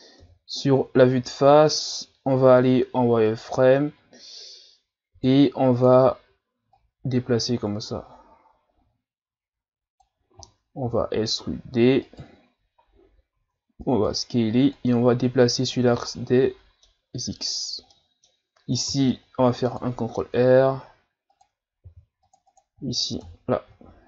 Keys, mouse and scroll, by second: 0.2 KP_1, 1.1-1.5 scroll down 2, 1.5 z, 3.3 right click, 5.1 b, 6.7 click, 12.9-13.4 scroll up 1, 13.4 s, 14.7 click, 15.9 z, 16.1-18.9 middle drag, 18.9 ctrl+r, 21.8 ctrl+r, 23.2 KP_1.